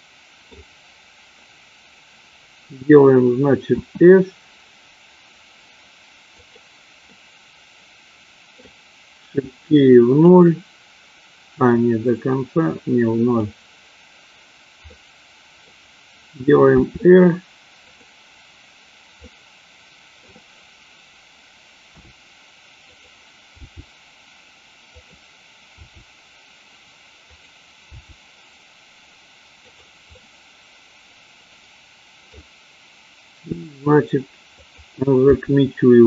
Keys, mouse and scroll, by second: 3.7 s, 6.6 click, 7.2 scroll up 1, 7.3-8.7 middle drag, 9.6 click, 11.7-13.7 drag, 15.0 middle click, 16.7 r, 19.4-20.5 middle drag, 21.8 r, 23.0 click, 23.7 g, 25.0 click, 26.0 r, 27.4 click, 28.1 g, 30.2-32.6 middle drag, 33.5 r, 35.3 g.